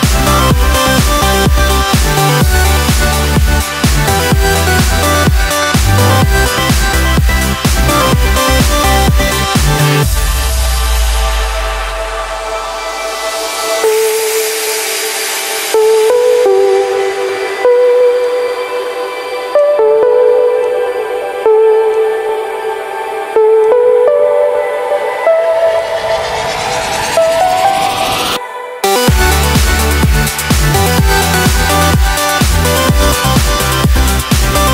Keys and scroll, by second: 33.1 ctrl+j.